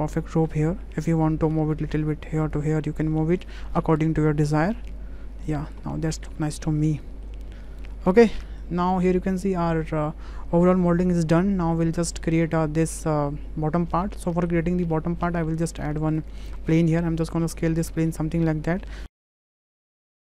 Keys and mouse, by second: 0.0 Tab, 1.6 g, 2.8 click, 4.0 g, 5.5 click, 6.5 Tab, 6.8-7.2 drag, 7.7-8.2 drag, 8.5 shift+click, 12.1 shift+click, 14.3 click, 15.2 shift+a, 16.6 s, 19.0 w, 19.1 click, 19.5 ctrl+a, 19.5 Tab, 19.7 click, 19.9 Tab, 20.0 Tab.